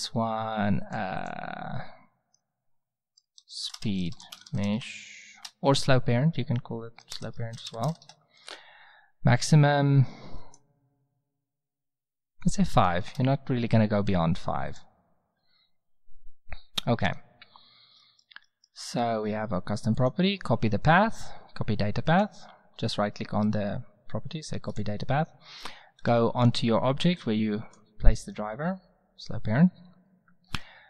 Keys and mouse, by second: 3.9 e, 18.0 middle click, 23.4-25.2 right drag, 26.0-27.3 right drag, 27.8-28.2 right drag, 28.8 right click, 30.5 t.